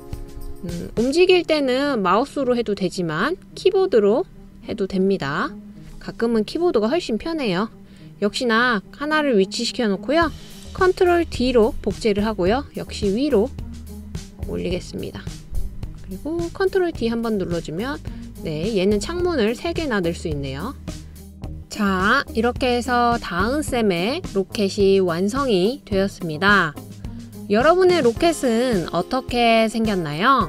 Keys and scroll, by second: 2.0 Down, 2.2 Down, 2.4 Down, 2.6 Down, 3.3 Left, 3.7 Left, 4.9 Down, 5.8 Down, 6.5 Left, 12.5 super+d, 18.3 super+d.